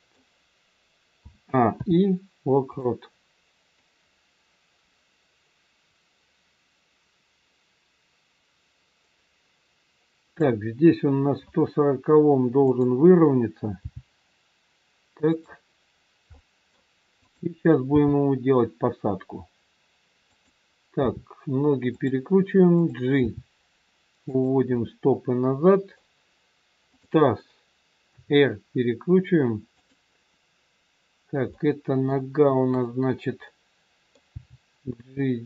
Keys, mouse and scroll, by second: 1.2 a, 1.7 i, 3.7 click, 12.6 click, 13.7 g, 16.3 middle click, 17.2 click, 17.9 g, 20.9 r, 22.8 click, 23.5 g, 24.7 middle click, 24.7 scroll up 1, 27.0 click, 28.1 r, 31.6 middle click, 32.7 click, 33.6 middle click, 34.2 g.